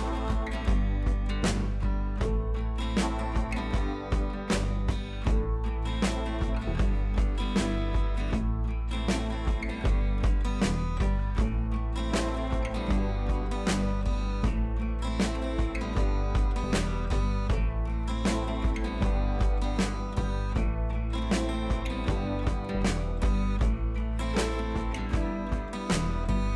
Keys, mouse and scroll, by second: 5.0-7.1 drag, 8.1 ctrl+], 11.6-12.7 drag, 14.1-14.7 click, 15.6-16.4 scroll up 1, 16.4 click, 21.2-22.0 click.